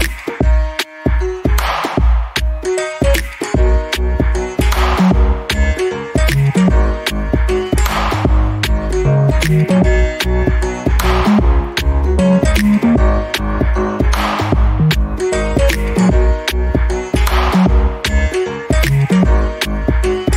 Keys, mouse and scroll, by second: 0.5 alt+g, 1.3 click, 4.1 double click, 5.0 click, 5.4 double click, 6.8 click, 15.8 double click, 16.4-16.7 scroll down 1, 17.0 alt+click, 18.1 scroll up 1, 18.6 alt+click.